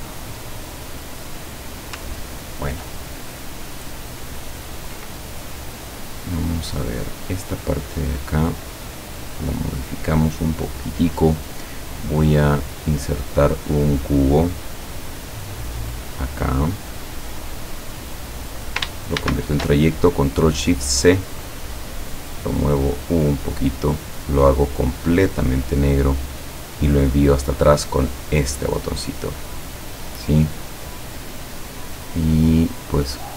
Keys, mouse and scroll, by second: 2.2 ctrl+scroll down 2, 3.0-4.2 ctrl+drag, 4.5 ctrl+scroll down 2, 5.2 ctrl+middle click, 7.7 click, 8.7 click, 12.5 click, 14.7-17.7 drag, 19.2 ctrl+shift+c, 21.5 click, 21.9-24.2 drag, 25.1 click, 28.3 click.